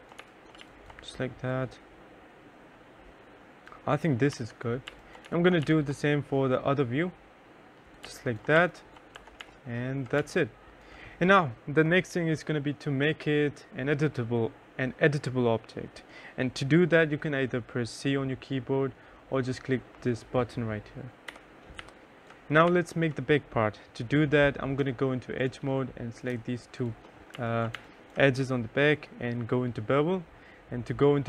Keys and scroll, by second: 0.0-0.5 typing, 3.7 F4, 4.0-5.5 typing, 7.4 2, 8.5 F1, 8.8 3, 20.7 c, 21.2 3, 26.7 2, 27.1 3.